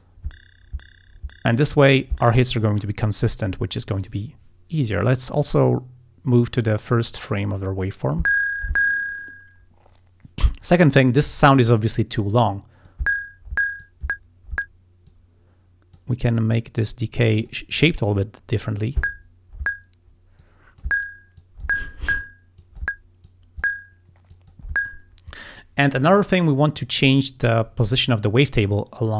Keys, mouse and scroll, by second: 5.5-7.4 drag, 11.9-13.1 drag, 13.8 click, 15.1-16.2 drag, 16.4-17.7 drag, 20.4 click, 21.4 click, 22.6 click, 23.3 click, 24.3 click.